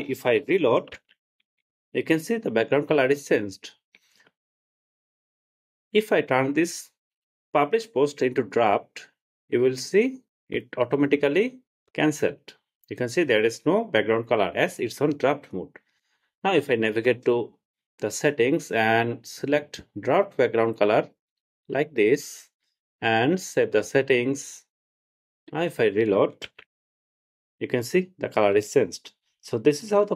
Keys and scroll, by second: 1.2 super+r, 26.7 super+r.